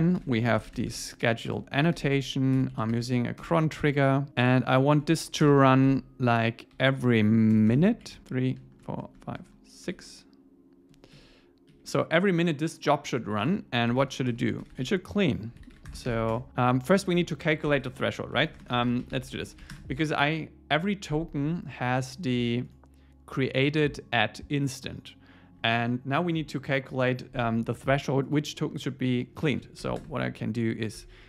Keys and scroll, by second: 0.2 alt+l, 1.5 Return, 3.4 Return, 11.2 Right, 13.4 Return, 16.1 alt+8, 16.3 Return, 17.7 Escape, 31.0 Tab.